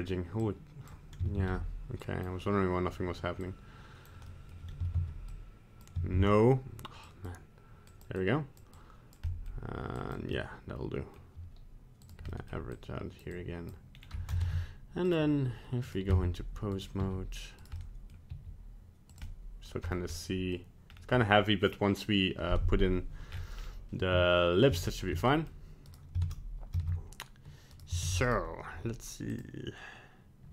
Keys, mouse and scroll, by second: 0.4 click, 1.5 ctrl+z, 2.0 click, 3.5 click, 4.3 middle click, 5.0 ctrl+z, 5.3 click, 6.2 ctrl+z, 7.1 click, 7.9 click, 8.2 click, 8.8 click, 9.3 middle click, 10.0 click, 10.4 middle click, 12.0 click, 12.3 middle click, 12.7 click, 13.3 click, 13.9 scroll down 2, 14.4 ctrl+Tab, 15.9 right click, 16.1 ctrl+Tab, 16.8 right click, 17.0 r, 17.8 middle click, 18.3 r, 19.3 middle click, 19.6 middle click, 19.9-20.2 scroll up 2, 20.2 middle click, 20.5 middle click, 20.9 scroll down 2, 23.3 scroll up 3, 23.6 scroll down 2, 24.8 ctrl+z, 25.3 middle click, 25.4 middle click, 25.9 right click, 26.2 ctrl+Tab, 26.8 ctrl+Tab, 27.8 right click, 28.1 ctrl+Tab, 28.3 right click, 29.3 click.